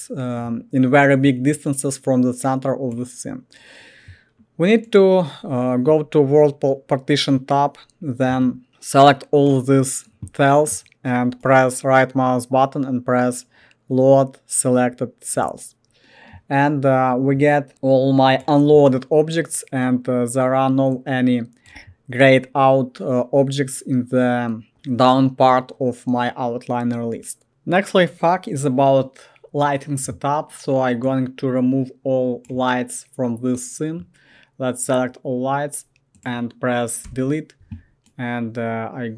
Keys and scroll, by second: 37.1 Delete.